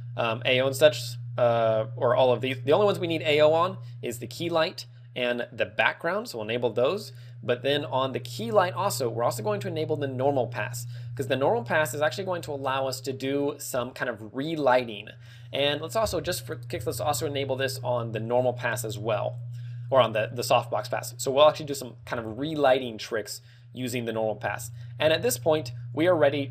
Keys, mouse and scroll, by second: 3.1 click, 3.6 click, 4.7 click, 6.2 click, 8.5 click, 10.5 click, 11.3 ctrl+w, 16.5 click, 18.6 click, 24.8 click, 25.7 z, 25.9 ctrl+w.